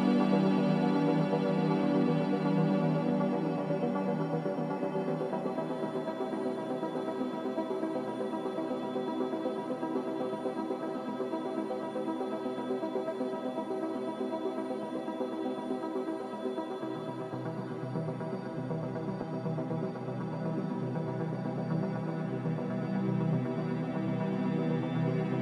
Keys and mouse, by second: 0.6 s, 5.9 s, 13.7-14.0 shift+middle drag, 15.0-15.9 shift+middle drag, 16.9 alt+z, 18.0 g, 22.7-23.2 shift+middle drag, 24.1 s.